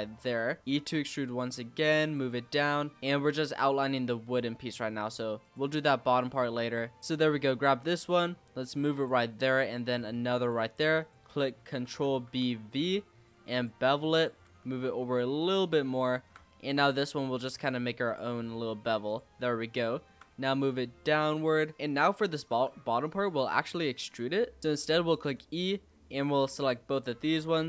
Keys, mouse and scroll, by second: 0.0-0.3 scroll up 4, 0.3 shift+middle click, 0.7 e, 2.3-2.6 scroll down 4, 2.6 shift+middle click, 3.0-3.5 scroll up 3, 3.5 e, 6.1 click, 6.6 click, 7.6 e, 9.2 e, 10.9 click, 11.8 ctrl+b, 14.1 click, 14.4 e, 16.0 shift+middle click, 16.2-16.8 shift+scroll up 4, 16.8 e, 17.5 e, 18.2 e, 19.3-19.7 scroll down 4, 19.7 shift+middle click, 20.3 e, 21.7-22.5 scroll up 7, 22.5 g, 24.2 e, 26.0 shift+click.